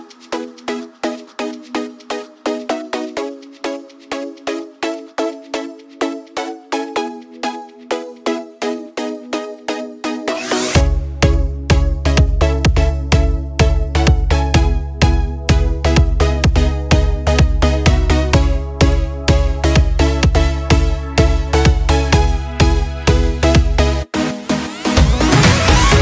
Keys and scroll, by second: 3.7 ctrl+Return, 13.0 ctrl+x, 15.1 ctrl+v, 21.4-23.0 typing, 24.0-26.0 Return.